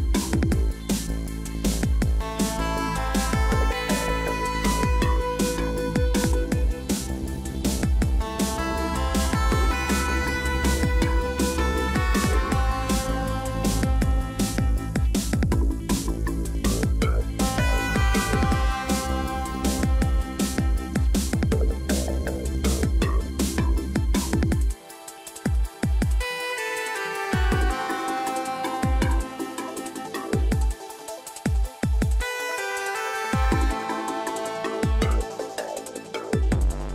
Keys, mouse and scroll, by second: 4.6 ctrl+click, 6.9 ctrl+t, 13.7 click, 15.0 click, 16.0 ctrl+j, 23.8 ctrl+t, 28.3 click, 34.2 right click.